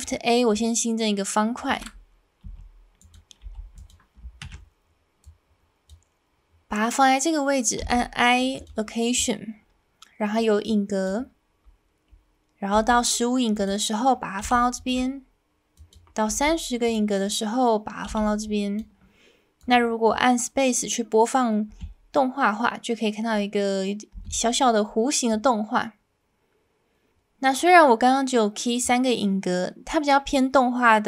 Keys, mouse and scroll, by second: 2.4 s, 3.0 click, 3.4 g, 3.8 click, 4.4 ctrl+a, 10.6 click, 12.7 g, 13.5 click, 14.4 i, 15.8 click, 16.3 g, 16.8 click, 18.1 i, 19.6 click, 21.7 space, 24.1 space, 25.3-28.8 drag.